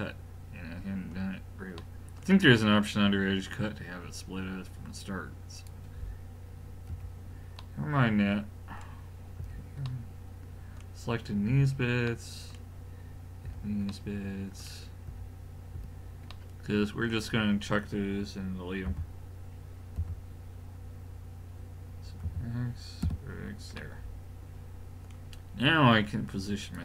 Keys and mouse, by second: 3.5-5.6 middle drag, 5.6 click, 6.9 l, 7.6 middle click, 9.4 l, 11.5 l, 13.5 l, 15.1 l, 15.8 l, 18.9 x, 22.2 x, 26.6 click.